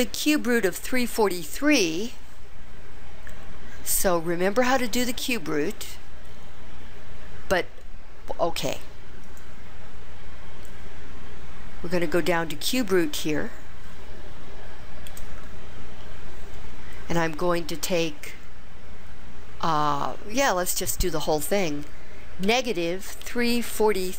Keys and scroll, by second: 15.2 4, 22.6 -, 23.4 3, 23.9 4.